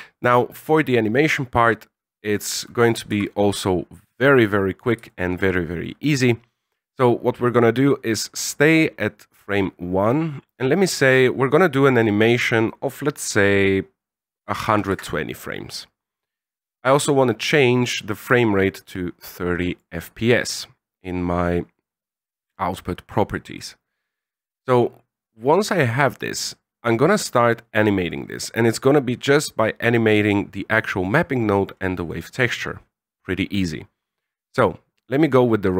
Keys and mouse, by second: 2.7 z, 3.1 z, 4.1 click, 5.0 shift+middle click, 10.9-15.5 drag, 16.7 drag, 18.7-19.7 drag, 25.1 click, 26.9 middle click, 27.9 middle click, 30.8 click, 31.5 click, 32.0 middle click, 34.7-35.7 drag.